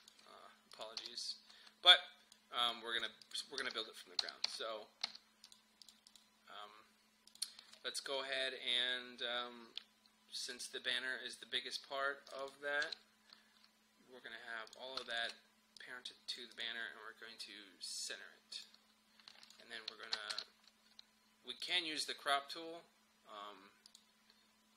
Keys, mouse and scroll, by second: 1.0 typing, 1.9-3.3 drag, 3.6-5.1 typing, 5.5 click, 10.5 click, 12.9 Delete, 14.7 click, 15.1 shift+click, 20.3 ctrl+k, 21.6-24.7 drag.